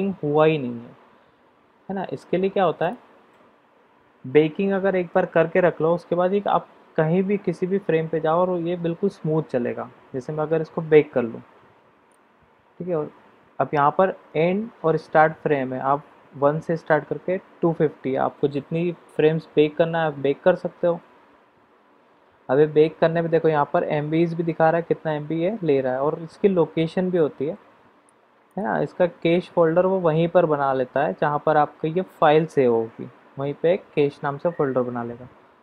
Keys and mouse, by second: 2.8 click, 12.0-35.6 drag.